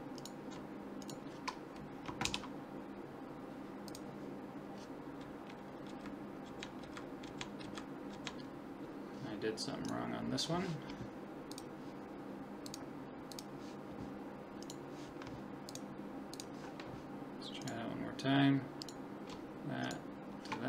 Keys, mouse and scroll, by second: 0.3-2.9 right drag, 2.2 ctrl+p, 5.9 Right, 6.5 Left, 6.8 Right, 7.3 Left, 7.6 Right, 8.1 Left, 10.0-11.5 right drag, 11.5-14.6 drag, 14.7-16.3 right drag, 15.7 click, 17.6-20.6 right drag.